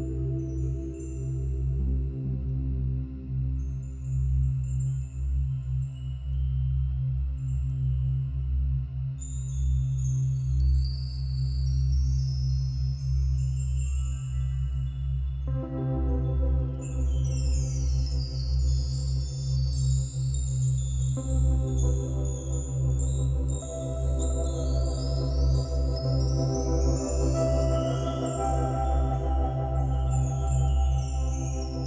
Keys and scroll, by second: 14.9 space, 19.6 ctrl+z.